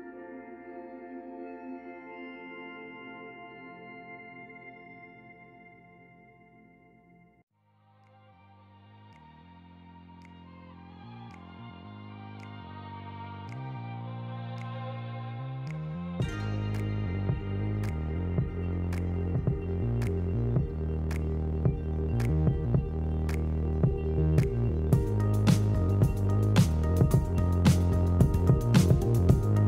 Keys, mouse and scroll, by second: 0.4-1.5 middle drag, 1.5 Tab, 1.7 scroll down 5, 2.0-2.7 middle drag, 2.7 scroll up 1, 2.8 ctrl+s, 5.2-5.6 middle drag, 5.6-7.5 scroll up 5, 7.5-8.0 middle drag, 8.0 scroll down 5, 8.3-9.4 middle drag, 9.4-9.9 scroll up 3, 9.9 Tab, 10.3 middle click, 10.6-11.6 scroll up 2, 11.6 l, 12.0 l, 12.3-15.4 middle drag, 15.9 scroll up 1, 16.0 Tab, 16.3 scroll down 2, 16.5 g, 17.1-18.1 scroll down 1, 18.1 o, 21.1 Tab, 21.8 alt+middle click, 22.3 shift+d, 23.2 r, 24.0 g, 24.4 s, 24.7 middle click, 25.8-28.8 typing, 29.4 middle click.